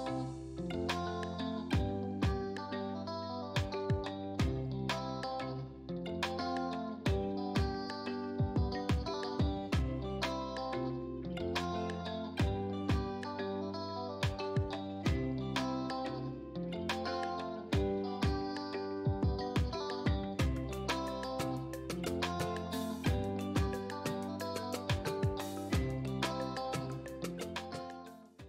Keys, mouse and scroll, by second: 2.3-12.0 drag.